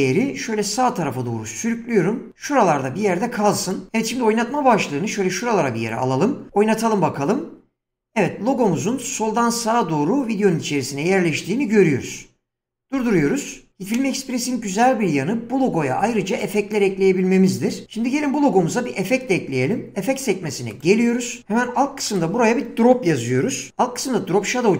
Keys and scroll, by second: 6.5 space, 12.9 space, 15.5 <.